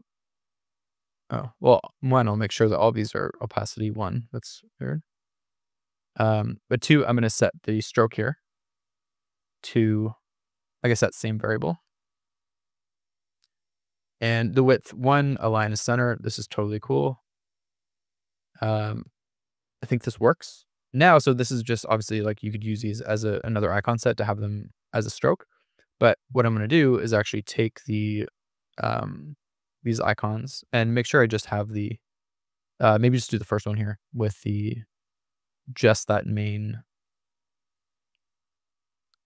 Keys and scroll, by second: 6.2 1, 6.5 Return, 15.2 super+=, 26.6 super+-.